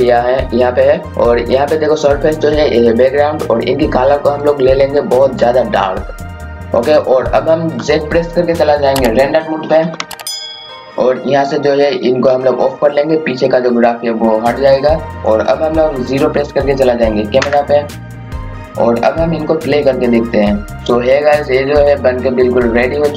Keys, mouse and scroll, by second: 1.1 click, 9.8-10.7 typing, 10.8 click, 17.4 KP_0, 20.8 scroll up 1.